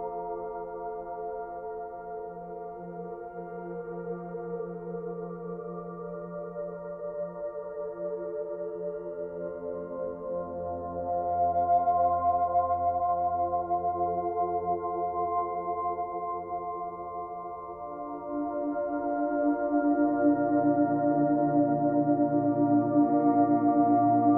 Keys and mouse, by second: 4.7-8.9 drag, 8.9 KP_2, 9.1 KP_5, 9.2 Return, 13.3 alt+click, 14.6 alt+click, 15.3 alt+click, 17.4 ctrl+alt+click, 18.3-22.2 drag, 19.5 ctrl+t.